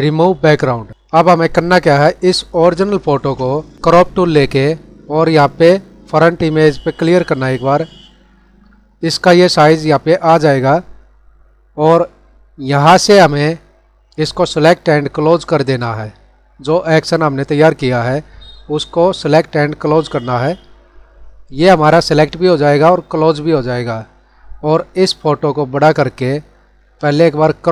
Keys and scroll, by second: 2.7 ctrl+0.